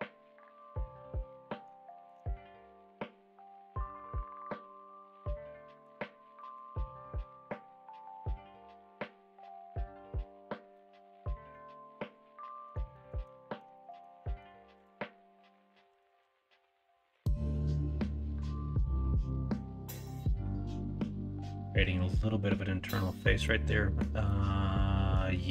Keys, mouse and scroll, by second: 0.6-1.1 middle drag, 1.3-1.6 middle drag, 1.9 shift+middle drag, 2.3-5.8 middle drag, 6.3 middle drag, 10.7-11.5 middle drag, 11.9-12.6 middle drag, 12.9 shift+middle drag, 13.3 middle drag, 13.7 shift+middle drag, 14.2 middle drag, 15.8 KP_1, 16.1 KP_3, 18.8-21.0 middle drag, 21.6 middle click, 23.4-23.9 middle drag, 24.2-25.1 middle drag.